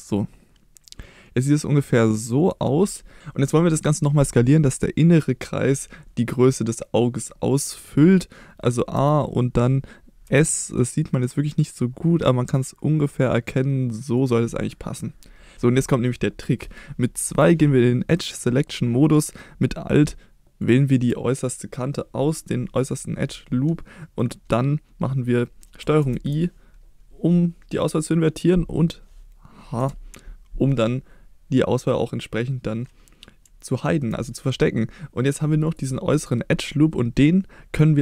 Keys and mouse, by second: 2.4 click, 3.2 a, 8.9 a, 10.2 s, 14.1 click, 15.5 2, 15.5 3, 17.2 2, 20.7 alt+click, 26.0 ctrl+i, 29.8 h, 33.7 shift+middle click, 35.7 click.